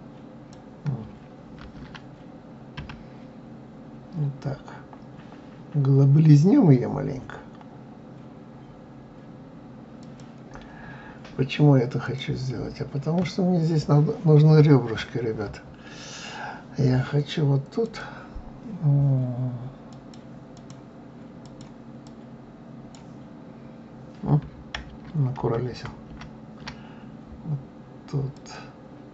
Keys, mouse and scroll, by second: 1.6 ctrl+z, 2.8 s, 12.0 click, 17.8 click, 19.9 click, 20.5 click, 21.4 click, 22.0-25.1 drag, 25.4 ctrl+z, 25.7 ctrl+z, 26.1 ctrl+z, 28.3 click.